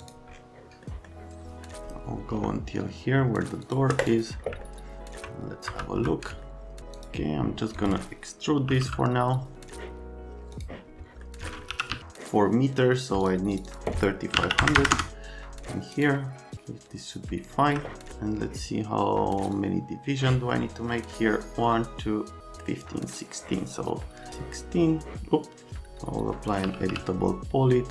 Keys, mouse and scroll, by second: 5.7 F3, 8.4-9.2 typing, 10.5 F12, 11.2 F12, 11.4-12.4 typing, 13.2 click, 13.5 click, 13.7 click, 14.3 KP_3, 14.4 KP_5, 14.6 KP_0, 14.8 KP_0, 14.9 KP_Enter, 15.9 right click, 26.4-27.3 typing.